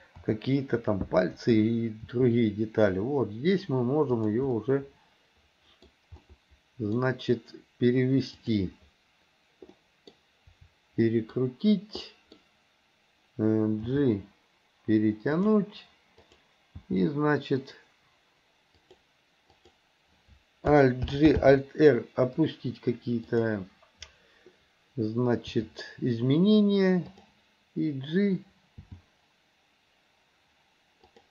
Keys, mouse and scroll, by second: 0.2 KP_7, 2.1 r, 4.6-5.9 middle drag, 5.9-6.3 scroll down 1, 6.3-7.0 scroll up 1, 7.0-8.4 scroll down 1, 8.4 click, 9.8 middle click, 11.2 middle click, 12.1 middle click, 13.9 g, 16.3 click, 16.8 g, 19.6 click, 21.1 alt+g, 21.4 alt+r, 23.3 click, 25.6 r, 28.9 g.